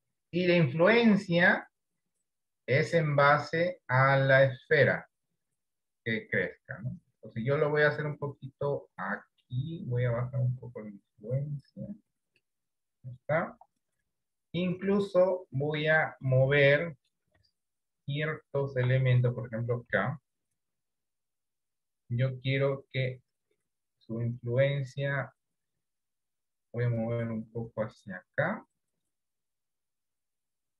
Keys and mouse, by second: 13.6 KP_1, 16.8 middle click, 19.9 KP_1, 21.9-30.7 drag.